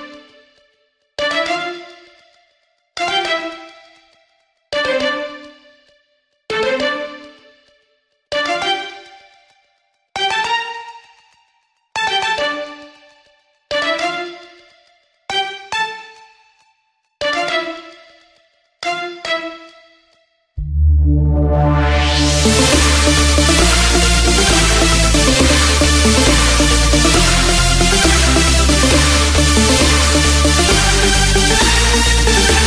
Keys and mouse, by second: 7.3 r, 20.0 KP_6, 29.9 shift+b.